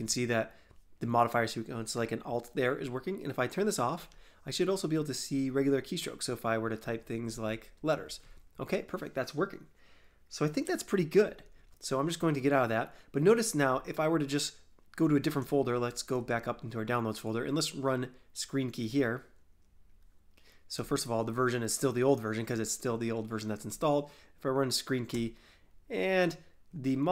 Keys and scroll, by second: 0.0 alt+Tab, 6.5-8.9 typing.